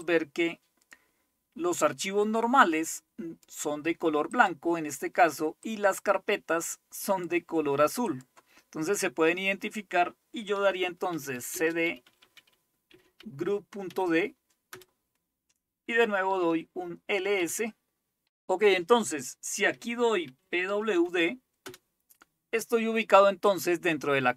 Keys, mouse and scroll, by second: 0.0-3.6 drag, 4.3 click, 5.7-7.3 drag, 8.1 click, 10.9-13.9 typing, 14.7 Return, 16.1-16.8 typing, 17.4 Return, 20.0-21.4 typing, 21.6 Return.